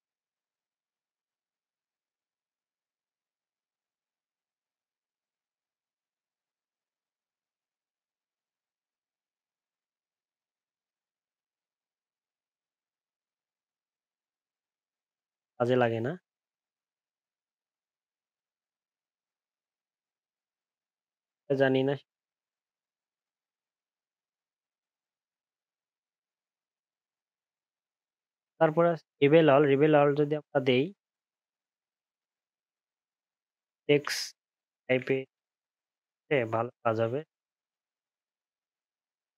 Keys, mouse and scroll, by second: 11.1 ctrl+z, 11.7 ctrl+shift+z, 12.6 alt+scroll up 1, 12.8 alt+scroll down 1, 13.4 alt+scroll up 1, 14.2 alt+scroll down 2, 25.6 alt+scroll down 4, 25.8 alt+scroll up 1, 26.0 alt+scroll down 1, 26.2 alt+scroll up 1, 31.9 alt+scroll down 1, 32.4 alt+scroll up 1, 33.3 alt+scroll down 5.